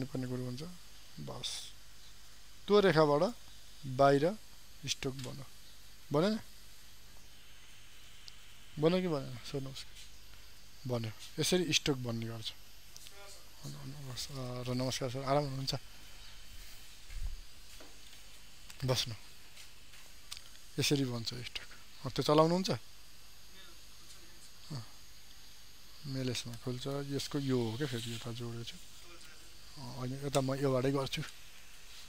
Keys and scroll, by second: 3.4 ctrl+d.